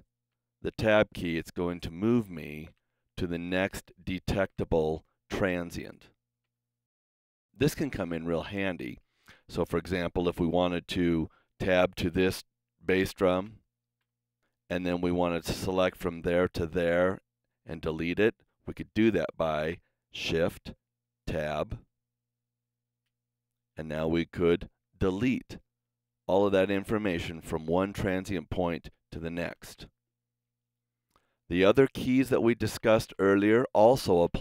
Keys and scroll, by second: 0.3 Tab, 2.7 ⊥, 3.5 Tab, 4.5 Tab, 13.5 Tab, 21.3 shift+Tab, 24.3 BackSpace, 29.6 super+z, 31.8 Tab, 32.7 Tab, 33.2 Tab.